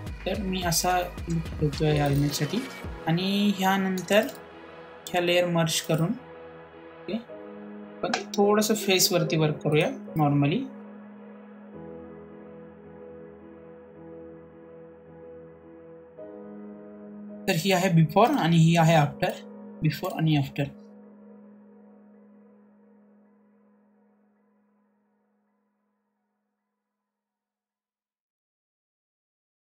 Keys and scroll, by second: 9.0 ctrl+j, 14.8 ctrl+z.